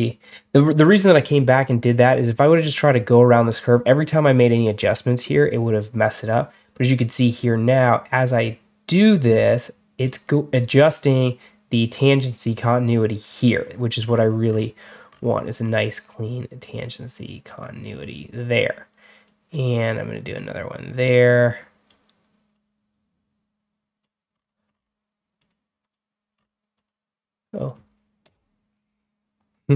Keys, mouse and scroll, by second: 6.7-9.9 drag, 13.9-14.3 scroll down 2, 14.3-15.2 scroll up 4, 15.5 scroll down 1, 16.5 click, 19.1 click, 20.4 click, 21.3 click, 22.4-23.9 drag, 24.2 scroll up 2, 24.6 scroll down 2, 25.3 click, 25.7 click, 26.2 scroll down 2, 26.6 click, 28.1 Return.